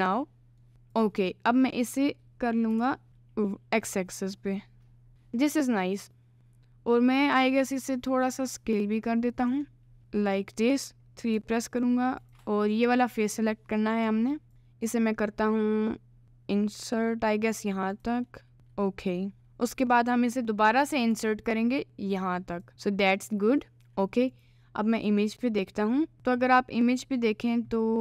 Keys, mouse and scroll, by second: 0.1 middle click, 2.7 g, 5.1 KP_Decimal, 7.5 s, 10.0 Tab, 10.0 middle click, 11.4 3, 11.7 click, 13.2 click, 13.9 click, 14.5 1, 18.3-19.9 middle drag, 19.9 click, 22.7 middle click, 23.6 middle click, 23.7 g.